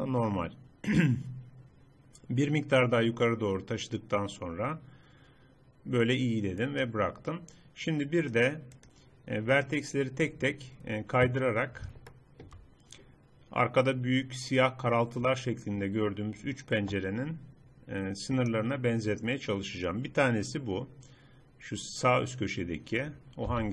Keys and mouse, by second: 8.3-11.4 drag, 11.4-13.3 middle drag, 18.4-20.2 drag, 23.6 z.